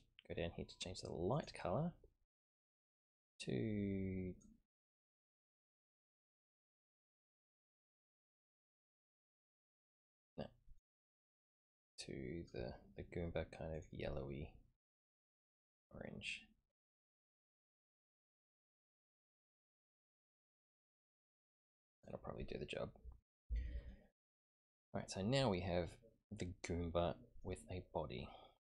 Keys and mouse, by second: 1.3 click, 13.7 click, 25.0-27.4 middle drag.